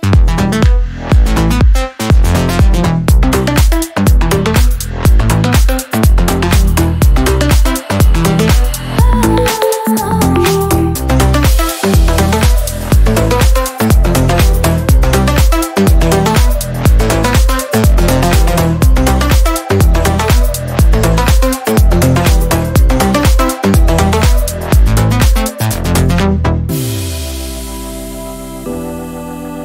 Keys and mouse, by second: 1.5-2.1 middle drag, 2.1 click, 2.9 click, 3.8-5.7 drag, 5.7 middle click, 6.3 ctrl+a, 8.7 drag, 9.9 click, 10.9 middle click, 11.8-14.9 drag, 15.5-16.6 middle drag, 16.6-19.7 drag, 19.7-20.9 middle drag, 20.9-24.3 drag, 24.9 click, 25.3-26.4 middle drag, 26.4 click, 27.4 click, 28.2 click, 28.8-29.4 ctrl+middle drag, 29.4 shift+a.